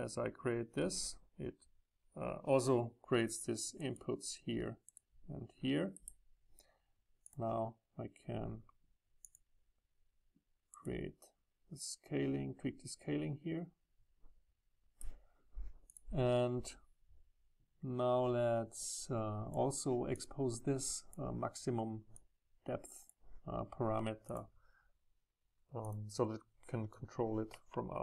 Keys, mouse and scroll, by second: 4.0-5.9 middle drag, 5.9-7.2 right drag, 7.2-10.6 drag, 10.6-11.8 middle drag, 11.8 right click, 14.0 middle click, 14.2 middle click, 14.4 middle click, 14.6 middle click, 14.6-17.9 drag, 18.9-27.6 drag, 27.6 ctrl+middle click.